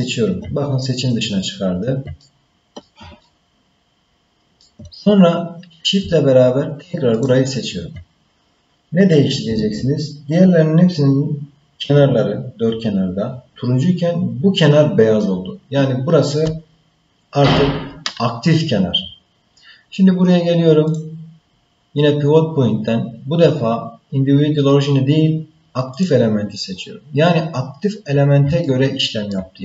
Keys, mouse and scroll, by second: 0.5 scroll up 1, 1.1 scroll down 1, 1.4-2.0 scroll down 1, 2.2 ctrl+middle click, 3.2-4.5 shift+middle drag, 7.1 shift+click, 20.9-26.6 drag, 28.6 shift+middle click.